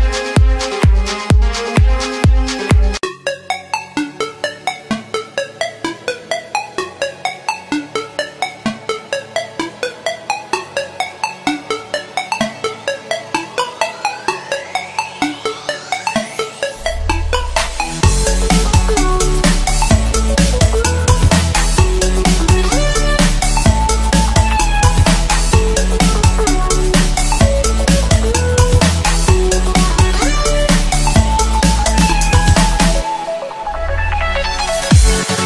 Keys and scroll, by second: 30.4 ctrl+z, 31.8 ctrl+z.